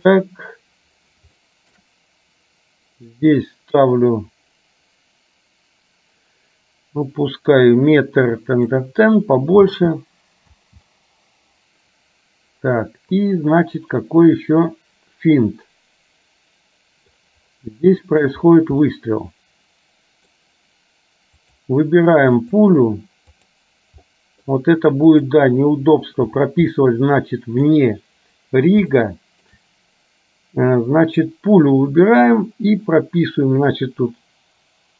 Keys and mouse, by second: 1.4 shift+middle click, 3.4-8.8 drag, 9.8 space, 13.4-17.4 drag, 18.0 shift+middle click, 18.9-20.4 middle drag, 21.6 click, 22.4 click, 23.5 click, 24.3 middle click, 26.9 middle click, 29.0 shift+middle click.